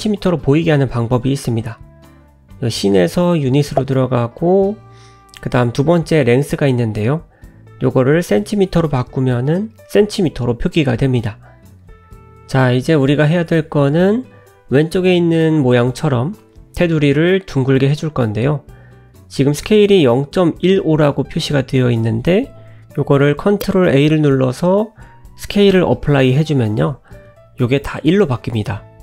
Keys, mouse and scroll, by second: 4.2 click, 5.9 click, 9.7 click, 11.7 click, 12.6 click, 13.1 scroll down 1, 13.4 middle click, 14.7 n, 16.1 n, 17.5 click, 20.3 ctrl+z, 22.7 shift+a, 25.2 ctrl+a.